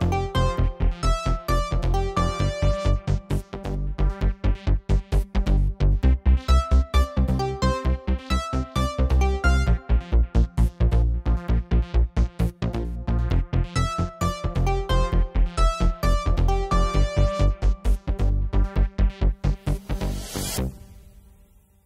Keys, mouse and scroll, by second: 1.6-3.4 drag, 4.2-5.8 drag, 5.9-7.0 middle drag, 7.8-10.5 drag, 11.8 BackSpace, 13.9-15.7 drag, 16.6 click, 18.2 shift+z.